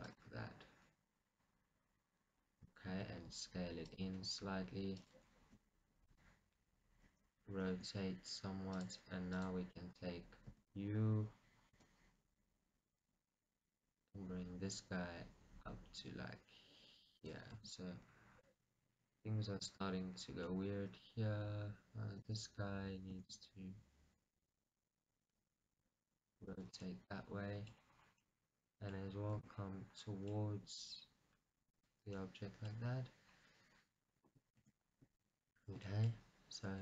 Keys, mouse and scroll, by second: 0.3 click, 0.4 g, 3.1 click, 3.3 s, 4.2 click, 4.4 g, 5.2 click, 5.8 r, 6.3 click, 8.0 r, 9.6 click, 10.8 e, 11.1 right click, 12.1 g, 17.6 click, 18.2 click, 18.2 w, 18.5 middle click, 20.0 scroll, 20.6 middle click, 23.5 r, 26.7 click, 27.0 middle click, 28.0 scroll, 28.4 middle click, 29.5 g, 32.0 click, 32.3 middle click, 33.5 scroll, 34.8 shift+middle click, 35.8 shift+middle click.